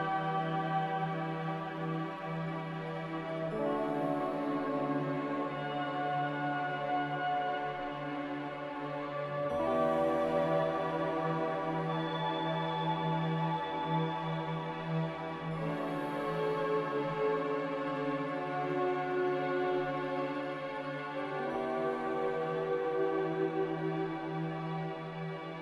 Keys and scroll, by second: 1.2-2.0 typing, 5.1 c, 17.3 b, 19.4 Delete, 20.7 Delete, 22.7 b.